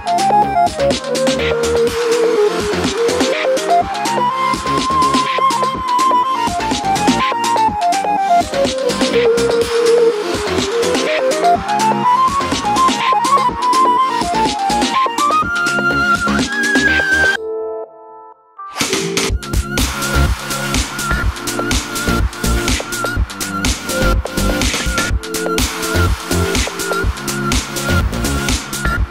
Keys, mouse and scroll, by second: 2.9 g, 11.6 click, 14.8 g, 24.2 click, 24.9-26.6 drag, 25.8 KP_Enter.